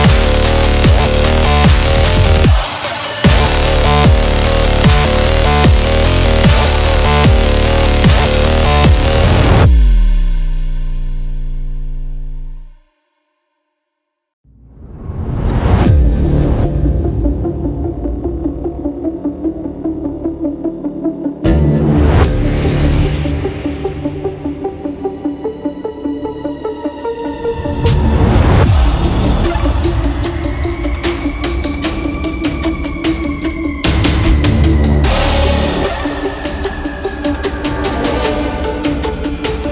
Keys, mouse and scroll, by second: 0.0-2.3 typing, 3.3 click, 3.8 ctrl+t, 4.3 click, 5.6 Return, 6.2 click, 6.9 Down, 7.2 Right, 8.4 Right, 9.1 click, 12.0-14.4 drag, 14.4 Down, 14.8 Left, 16.1 scroll up 1, 16.2 scroll down 1, 16.5 space, 16.6 click, 16.8 space, 17.4 click, 20.2 space, 20.3 click, 20.5 space, 20.7 scroll down 1, 21.0 space, 21.2 click, 21.3 space, 22.5 click, 23.6-27.8 drag, 28.8 i, 29.0 ctrl+c, 29.2 ctrl+v, 29.8-31.8 drag, 31.8 scroll up 1, 32.1 ctrl+t, 32.8 right click, 32.8 right click, 33.5-36.2 drag, 36.2 scroll up 1, 37.3 click, 38.2 Return, 38.6 scroll down 1, 39.0 Up.